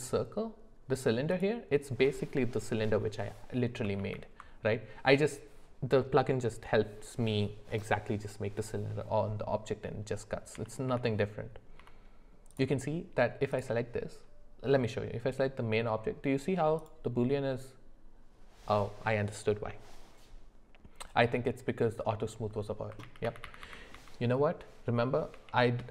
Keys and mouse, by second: 4.0 ctrl+z, 10.5 g, 13.5 click, 16.8 click, 23.0 ctrl+z, 23.2 ctrl+z, 23.9 ctrl+z, 25.8 ctrl+z.